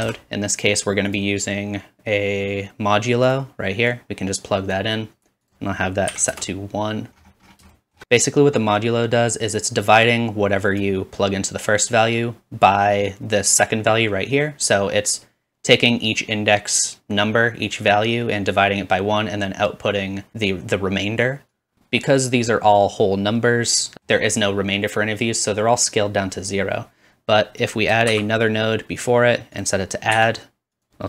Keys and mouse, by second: 4.3-22.2 drag, 27.7 middle click, 28.2 shift+d, 29.4 click.